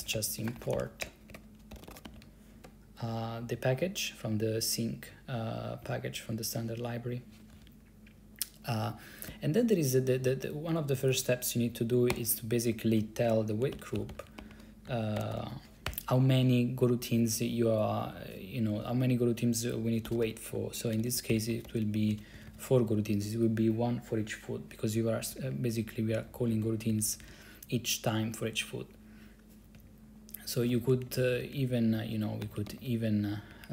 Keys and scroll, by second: 0.0-3.6 typing, 5.9 Right, 7.6 ctrl+c, 12.2 o, 13.4-16.0 typing, 16.0 Left, 19.9-22.7 typing, 25.4 Down, 25.6 Down, 26.2 Left, 26.4 Left, 26.5 Left, 26.6 Left, 27.0 Left, 27.2 Left, 27.3 Left, 29.9 Up, 30.8 Right, 31.0 Right, 31.1 Right, 31.2 Right, 31.3 Right, 31.4 Right, 31.6 Right, 31.7 Right, 32.6 ctrl+c, 32.8 d, 32.9 d, 33.6 Up.